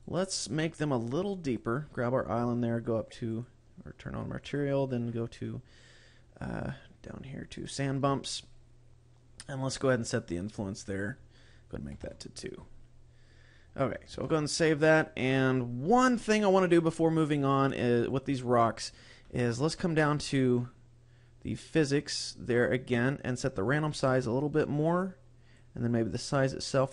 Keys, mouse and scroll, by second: 0.2 right click, 1.7 click, 2.4-3.2 scroll up 4, 3.6 click, 4.8 click, 7.0 click, 7.1 scroll down 2, 7.8 click, 8.6-9.8 scroll down 7, 10.2-11.2 scroll down 1, 11.2 click, 11.2-11.8 scroll down 1, 13.2-14.0 scroll up 3, 14.5 ctrl+s, 16.4 right click, 17.1 right click, 18.3 click, 20.0-22.3 scroll down 6, 22.8-24.0 scroll down 1, 24.0 click, 26.4 click.